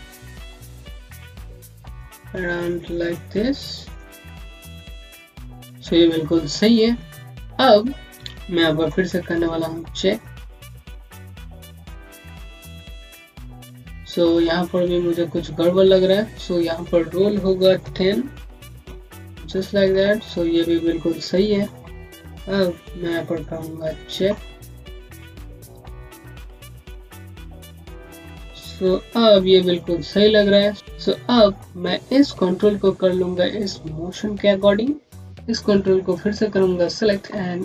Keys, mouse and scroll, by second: 0.1 click, 2.1 scroll up 1, 3.0 click, 5.4 Left, 6.0 scroll down 1, 9.6-10.7 typing, 11.7-12.6 typing, 14.6 scroll down 1, 18.4 KP_0, 18.5 KP_Decimal, 18.7 KP_Enter, 25.3 click, 28.3 scroll down 1, 28.4 scroll up 1, 30.7-35.3 scroll up 1, 35.3 click, 37.4 click.